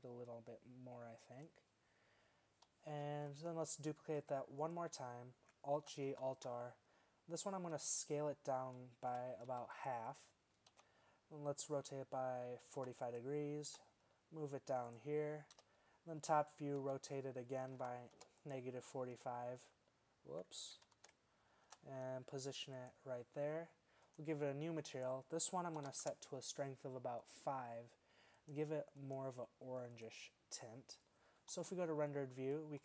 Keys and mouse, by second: 3.0 z, 4.2 shift+d, 5.8 alt+g, 6.1 alt+r, 7.6 s, 10.8 KP_3, 11.6 r, 13.7 g, 15.6 KP_7, 16.9 r, 19.2 h, 21.0 ctrl+z, 21.7 g, 31.6 shift+z.